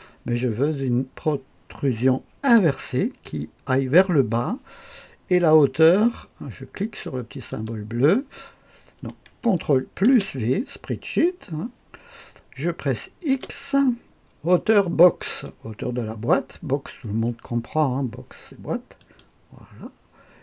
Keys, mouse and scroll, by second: 2.7 click, 4.1 click, 7.5 click, 10.0 ctrl+v, 13.3 x, 15.2 click, 19.0 click.